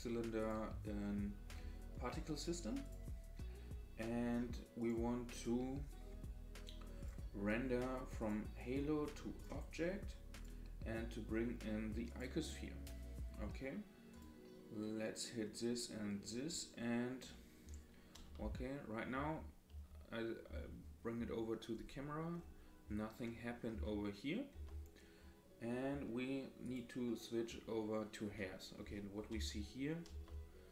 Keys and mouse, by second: 0.6-3.0 drag, 4.8 click, 8.4-9.4 drag, 10.5-12.3 drag, 18.3-20.5 typing, 23.7 KP_0, 24.5 KP_0, 26.6 click, 28.4-28.9 middle drag, 29.3 KP_Decimal, 30.1 KP_0.